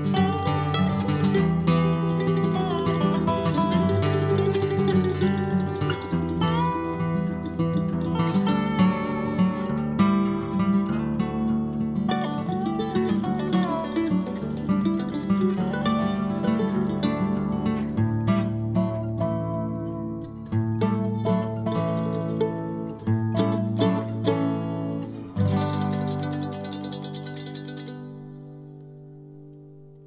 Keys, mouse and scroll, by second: 0.0 click, 0.6-1.8 middle drag, 1.8 n, 2.8 click, 3.3 n, 3.7 click, 4.4-5.5 middle drag, 5.5-8.8 drag, 8.8-10.3 middle drag, 10.3-12.1 drag, 12.1 middle click, 12.7-14.9 drag, 14.9-16.0 middle drag, 16.0-17.8 drag, 17.8-19.0 middle drag, 19.0-21.7 drag, 21.7-22.9 middle drag, 22.9-24.6 drag, 24.6 n, 25.2 click, 25.4 click, 25.8 n, 26.0-28.4 middle drag, 28.4 click, 29.0-30.0 middle drag.